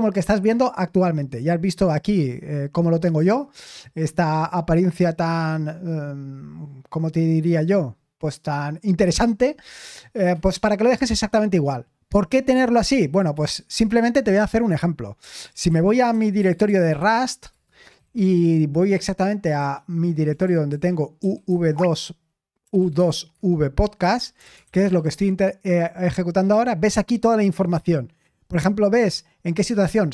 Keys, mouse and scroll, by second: 1.7-3.4 drag, 15.1-18.1 typing, 19.4-25.7 typing.